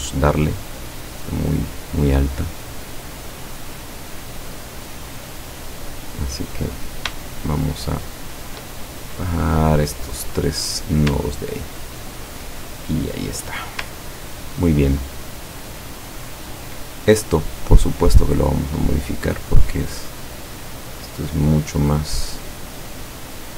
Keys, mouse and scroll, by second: 0.8 click, 4.0-5.3 drag, 5.7-7.0 drag, 7.4 shift+click, 8.3 shift+click, 9.0-11.0 shift+drag, 11.3-12.1 ctrl+scroll down 4, 12.8-13.8 ctrl+drag, 13.8-14.3 scroll down 4, 15.2 ctrl+scroll up 2, 15.8 ctrl+scroll up 2, 17.8 click, 18.7-21.6 drag, 22.0-23.5 drag.